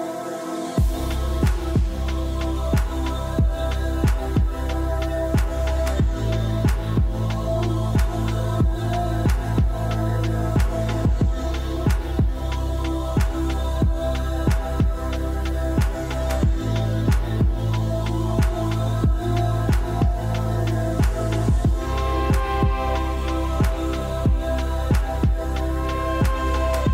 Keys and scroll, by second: 4.4 End.